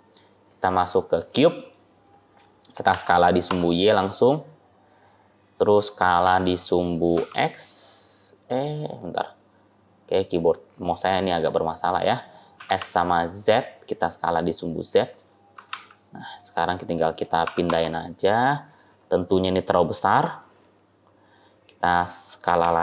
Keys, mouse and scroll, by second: 1.6 middle click, 2.8 s, 6.1 s, 11.0 middle click, 12.4 s, 15.4 g, 17.3 g, 18.8 scroll down 1, 19.2-19.5 scroll up 4, 19.6 shift+middle click, 20.2 scroll up 1, 22.3 g.